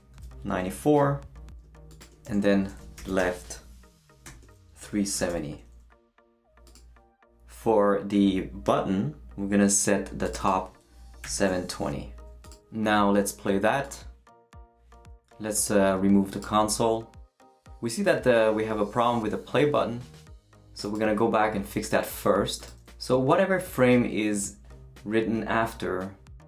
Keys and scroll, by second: 0.0-0.1 typing, 2.4-5.8 typing, 11.0-12.0 typing.